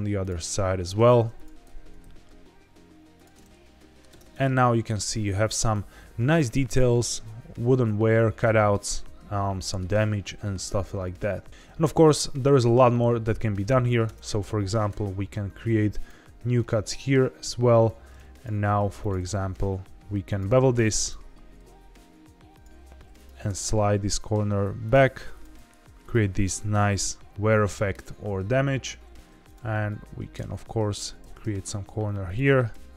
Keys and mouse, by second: 0.6 ctrl+x, 1.0 1, 1.3 click, 1.7 ctrl+b, 2.0 v, 3.1 click, 3.3 middle click, 4.0 Tab, 9.5 shift+middle drag, 12.7 middle click, 14.0 Tab, 14.8 ctrl+r, 16.2 Escape, 17.8 2, 18.3 click, 19.4 ctrl+b, 20.2 click, 20.5 ctrl+z, 20.9 click, 21.4 ctrl+b, 22.5 click, 22.7 1, 23.1 click, 23.4 g, 23.6 g, 24.8 click, 25.3 click, 25.5 g, 26.0 click, 26.4 Tab, 29.4 click, 29.8 middle click, 30.9 click, 31.2 ctrl+b, 31.4 v, 32.2 click, 32.6 ctrl+t.